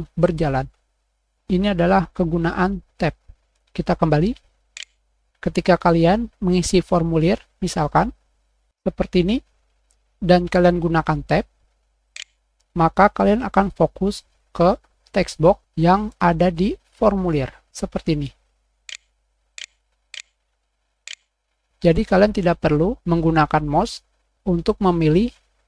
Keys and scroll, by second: 1.3 super+Tab, 8.3 super+Caps_Lock.